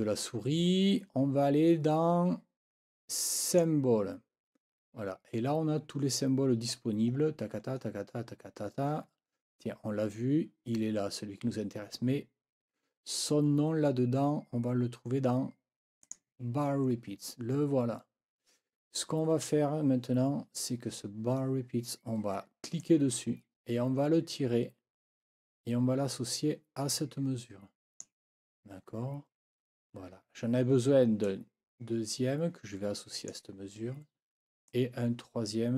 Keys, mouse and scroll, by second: 3.4 click, 6.2-7.0 scroll down 2, 8.2 scroll down 1, 8.4-9.6 scroll up 3, 11.0 scroll up 1, 12.0-12.5 scroll down 2, 13.3 scroll up 1, 16.0 click, 18.6 scroll down 1, 22.8-28.2 drag, 31.2-33.5 drag, 34.7-35.7 drag.